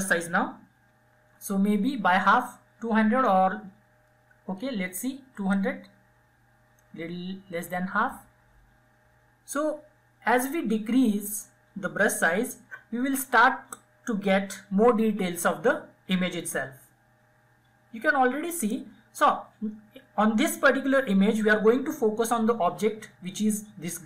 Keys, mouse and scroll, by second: 0.0 [, 0.2 [, 0.5 [, 4.3-14.2 drag.